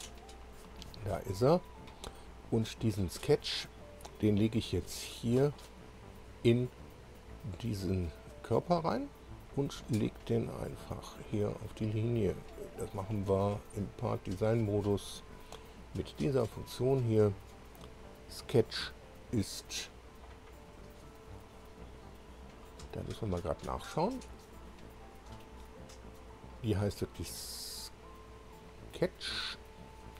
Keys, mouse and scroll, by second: 0.1-0.4 scroll down 2, 1.0 click, 4.6-6.0 drag, 10.7 click, 11.6 middle click, 13.9 click, 14.8 click, 16.3 click, 17.9 click, 21.0 click, 21.5 click, 22.5 click, 24.5 click.